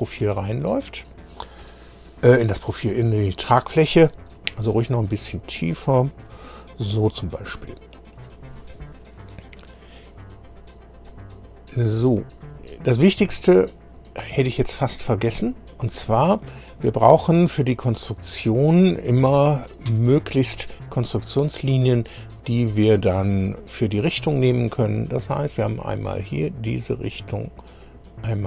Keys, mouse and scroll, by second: 2.8 scroll down 2, 5.0-6.4 drag, 11.1 click, 13.7 scroll down 2, 14.4 click, 15.5-16.1 scroll up 2, 16.4 shift+middle click, 17.4 scroll up 2, 21.4 click, 23.3 click, 25.6 click, 26.7 click.